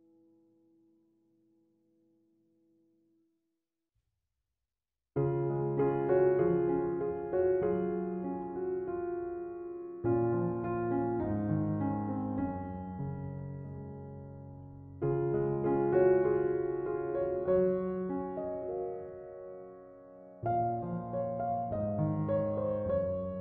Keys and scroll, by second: 4.6 space.